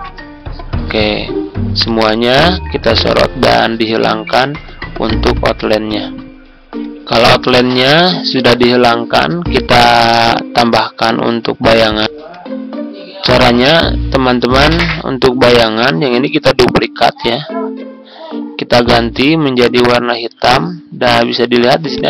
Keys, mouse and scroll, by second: 5.0 right click, 5.8 click, 6.4 Tab, 8.4 click, 12.0 Tab, 13.3 click, 13.9-14.8 ctrl+scroll up 1, 14.8 click, 15.1 click, 16.4 ctrl+d, 17.1-22.0 drag.